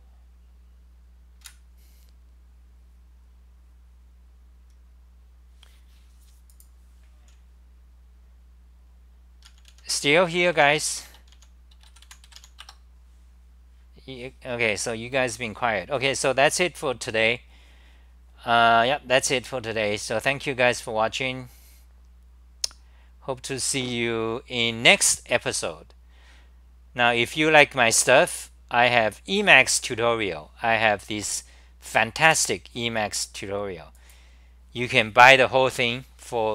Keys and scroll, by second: 32.5 super+r.